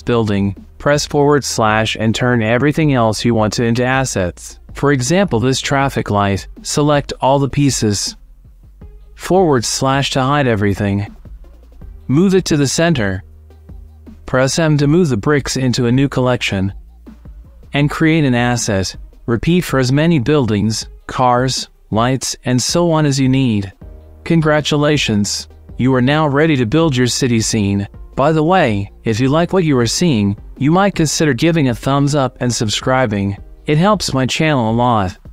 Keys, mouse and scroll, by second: 1.7 KP_Divide, 3.0-5.2 middle drag, 6.2-7.3 middle drag, 7.5 click, 9.2 middle click, 10.3 KP_Divide, 10.8 click, 11.0 ;, 11.8 g, 13.0 g, 14.2 click, 14.8 click, 15.7 click, 16.2 m, 17.2 f, 19.9 click, 20.6 click, 21.4-22.4 drag, 25.4-25.8 shift+drag, 29.2-30.9 middle drag, 31.6 middle click, 34.4-34.8 drag.